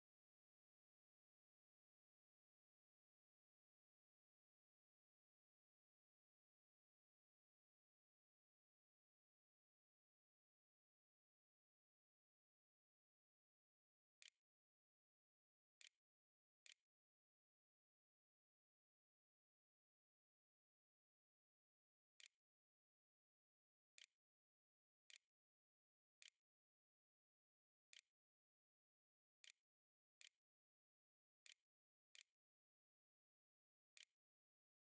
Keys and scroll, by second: 13.5 ., 13.7 Up, 14.5 shift+Return, 14.7 shift+', 15.3 shift+[, 16.2 Return, 18.5-19.4 typing, 21.0 space, 21.3 Up, 22.0 Return, 23.0-34.8 typing.